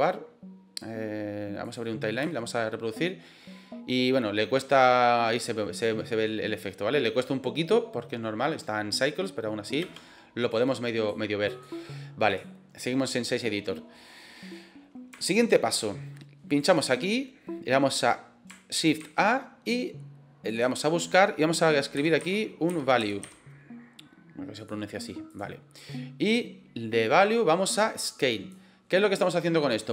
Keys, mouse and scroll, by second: 2.1 space, 9.8 space, 10.5-11.1 drag, 11.4-12.4 drag, 15.3 shift+middle click, 16.4 click, 27.3-28.6 drag.